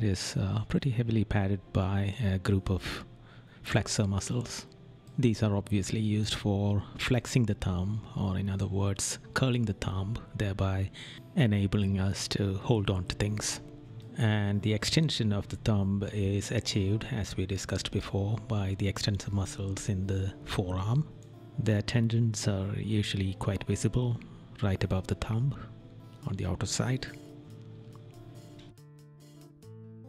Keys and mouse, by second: 1.8 right click, 6.6 right click, 8.3 right click, 10.2 right click, 13.3 right click, 17.7 right click, 22.7 right click, 25.9 right click.